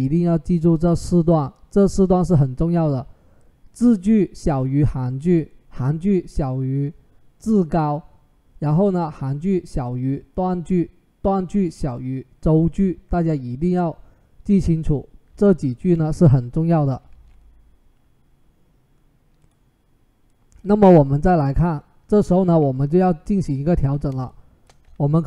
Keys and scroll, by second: 16.3 ctrl+z, 16.9 ctrl+z.